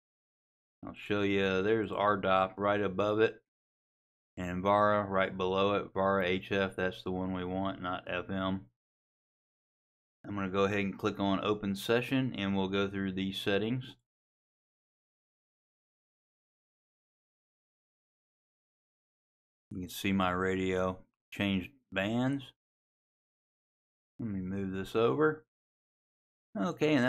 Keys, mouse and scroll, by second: 0.1 click, 1.2 click, 2.1 click, 2.8 click, 24.9 click.